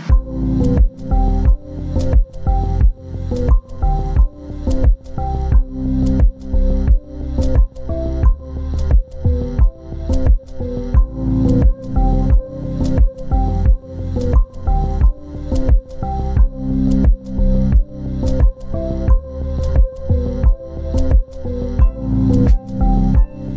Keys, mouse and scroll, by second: 19.6 scroll up 1, 22.7 scroll down 1.